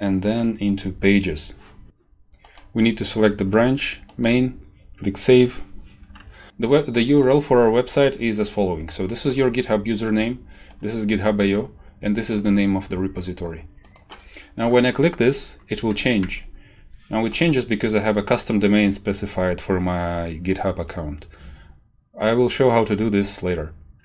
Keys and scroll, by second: 16.2 Return.